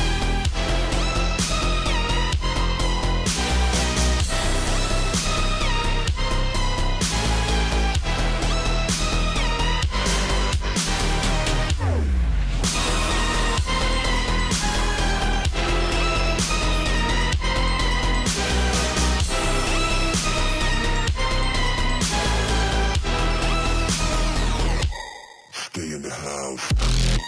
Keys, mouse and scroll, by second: 23.2-27.2 drag.